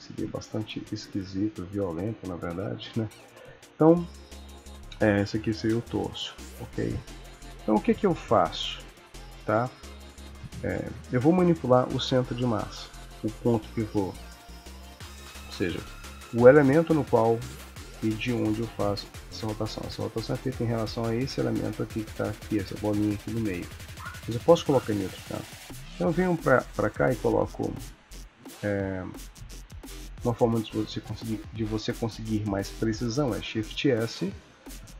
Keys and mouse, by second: 1.1 ctrl+s, 3.8 click, 5.3 s, 6.2 click, 7.1 ctrl+s, 9.3 click, 10.1 click, 18.3 r, 23.1 r, 25.7 click, 33.4 shift+s.